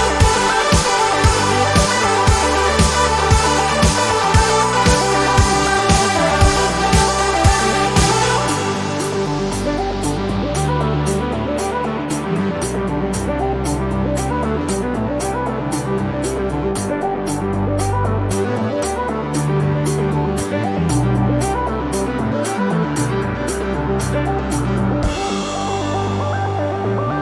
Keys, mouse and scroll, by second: 1.1 click, 2.5-3.9 ctrl+shift+drag, 5.8 click, 7.3 click, 9.0 click, 10.2-11.7 drag, 14.7-16.0 ctrl+shift+drag, 16.3-17.8 ctrl+shift+drag, 18.3-19.0 ctrl+scroll up 4, 19.4 ctrl+scroll down 2, 20.4 ctrl+space, 23.5 ctrl+d, 24.7 ctrl+d, 25.4-27.2 ctrl+drag.